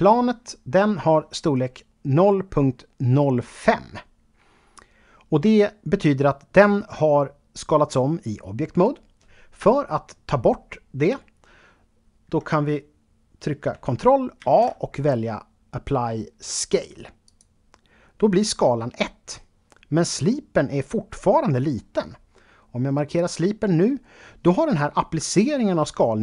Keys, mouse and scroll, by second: 14.4 ctrl+a, 17.3 click, 23.2 click.